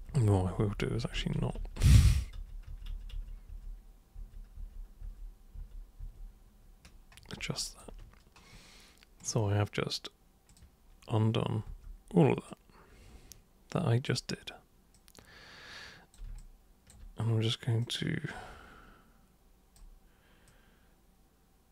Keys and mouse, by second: 0.1 ctrl+super+z, 0.3 ctrl+super+z, 0.6 ctrl+super+z, 1.3 ctrl+super+z, 1.8 ctrl+super+z, 2.3 ctrl+super+z, 2.7 ctrl+super+z, 2.9 ctrl+super+z, 3.1 ctrl+super+z, 3.5 ctrl+super+z, 4.1 ctrl+super+z, 4.5 ctrl+super+z, 5.0 ctrl+super+z, 5.5 ctrl+super+z, 6.0 ctrl+super+z, 7.6 alt+super+click, 9.2 super+click, 10.5 super+click, 11.6 super+w, 12.5-14.1 super+drag, 14.9-16.1 super+drag, 16.3-16.9 alt+super+drag, 17.8-19.7 super+drag, 20.4 super+click.